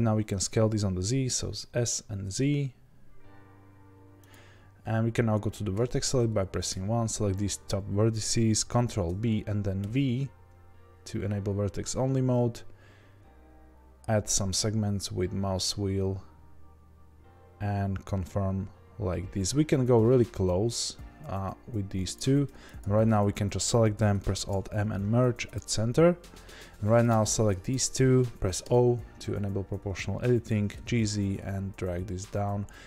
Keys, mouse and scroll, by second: 5.7 1, 6.7 click, 8.8 ctrl+b, 22.8 click, 25.5 alt+m, 27.0 click, 27.7 shift+click, 28.6 o.